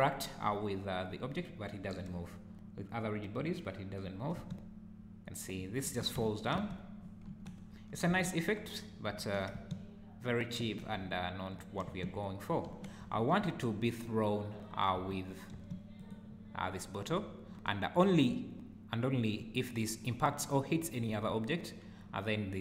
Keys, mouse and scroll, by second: 4.4 space, 5.9 Escape, 6.2 `, 6.6 space, 7.3 Escape, 7.7 `, 8.1 space, 9.2 Escape, 9.5 space, 10.7 Escape, 11.0 `, 11.9 space, 12.7 Escape, 13.1 `, 14.6-14.9 scroll down 2, 14.9 space, 15.5 space, 16.0 click.